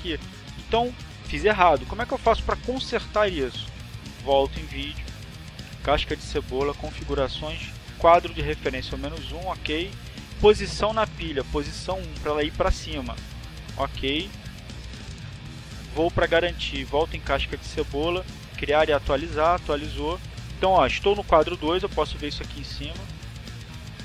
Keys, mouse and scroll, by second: 4.1 click, 6.2 click, 11.0 click, 13.3 click, 15.4 click, 18.3 click, 23.5 click.